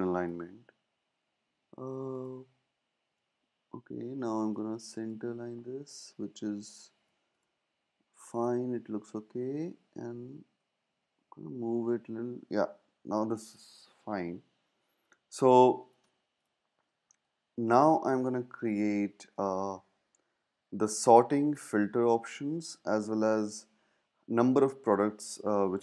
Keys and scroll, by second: 9.6 shift+Left, 10.6 Right, 10.8 Right, 11.0 Right, 11.1 Right, 11.3 Right.